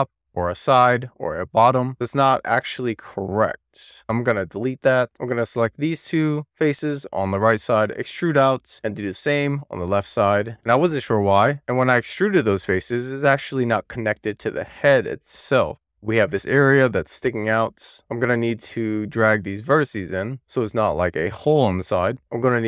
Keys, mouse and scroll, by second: 0.1 shift+click, 0.6 shift+click, 1.1 middle click, 1.2 scroll down 3, 1.3 alt+z, 1.4 shift+middle click, 1.5 scroll up 2, 1.6 middle click, 1.7 click, 2.1-4.0 middle drag, 4.0 3, 4.2 click, 4.7 x, 5.0 middle click, 5.7 click, 5.8 middle click, 6.7 d, 8.6 middle click, 8.9 shift+scroll down 1, 9.0 middle click, 9.2 d, 9.8 click, 9.8 middle click, 10.6 scroll up 2, 10.7-13.4 middle drag, 13.5-15.4 middle drag, 15.6 scroll down 1, 15.8 middle click, 16.2 scroll up 1, 16.4 middle click, 17.9-18.3 scroll up 2, 18.3 click, 19.2 click, 19.8 super+z, 20.3 middle click, 21.2 alt+click, 21.9 alt+middle click.